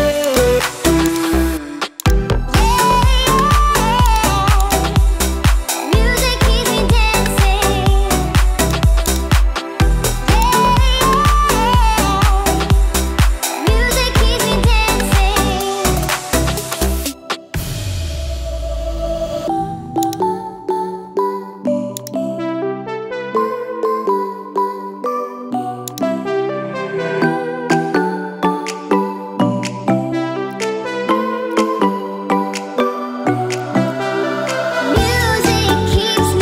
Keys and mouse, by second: 0.3-1.2 drag, 12.1 shift+middle drag, 23.3-24.3 drag, 28.8-29.7 shift+middle drag, 32.6-36.4 middle drag.